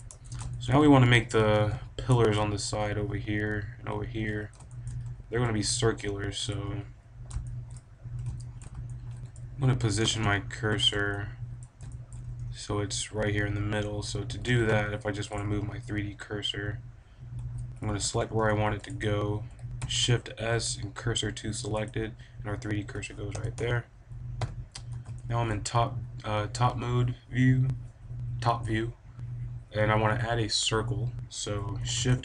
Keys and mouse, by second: 0.0 Tab, 1.4 KP_7, 1.6 KP_5, 5.0 click, 5.5 a, 6.4 click, 9.9 b, 11.2 middle click, 13.6 click, 14.3 a, 14.4 b, 15.2-17.2 drag, 17.8 a, 17.9 b, 18.7 click, 19.7 shift+s, 23.2 KP_7, 23.4 KP_5, 24.3 KP_5, 25.2 click, 31.9 shift+a.